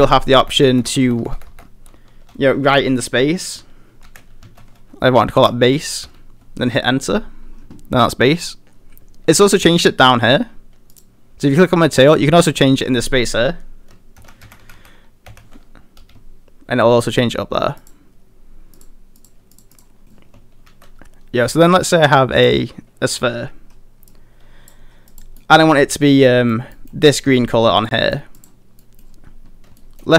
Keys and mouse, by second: 0.5-1.4 typing, 10.9 click, 12.6-16.0 drag, 14.8 e, 17.9 click, 18.7 click, 19.2 click, 19.5 click, 20.0 middle click, 20.7 shift+a, 25.4 middle click, 26.2-26.5 middle drag, 26.7 middle drag, 27.9 middle drag, 28.8 middle drag, 29.8 shift+middle drag.